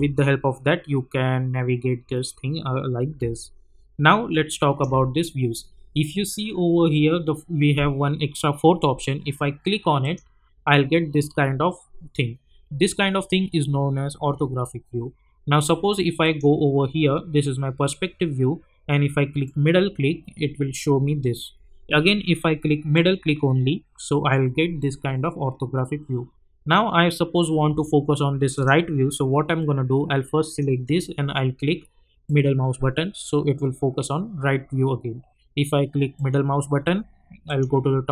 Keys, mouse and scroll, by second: 2.4-3.2 scroll down 2, 3.3-4.9 alt+drag, 5.2 scroll down 1, 10.0 click, 16.2 click, 19.4 middle click, 22.9 middle click, 28.5 click, 28.5 click, 32.2 middle click, 36.2 middle click, 37.5 click.